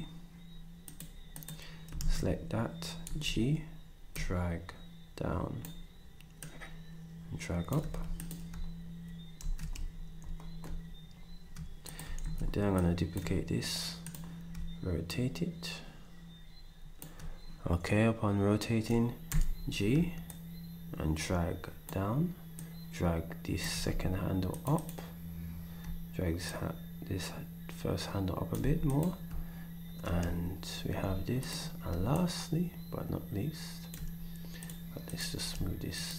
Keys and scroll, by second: 2.0 ctrl+s, 3.0 g, 7.9 s, 9.4 s, 12.2 d, 19.3 g, 23.8 s, 28.6 s.